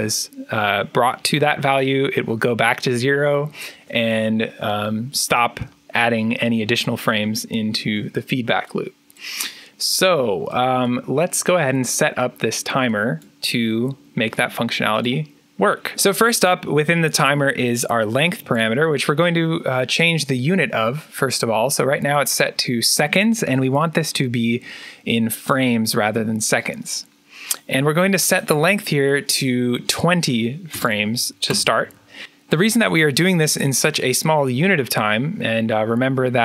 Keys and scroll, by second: 15.9 ctrl+z, 30.4-31.9 typing.